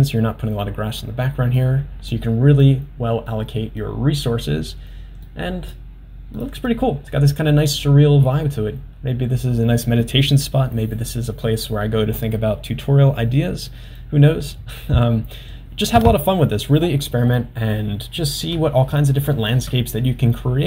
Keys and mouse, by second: 1.1-1.6 middle drag, 2.2-2.7 middle drag, 3.3-4.9 middle drag, 5.4-5.8 middle drag, 6.5 click.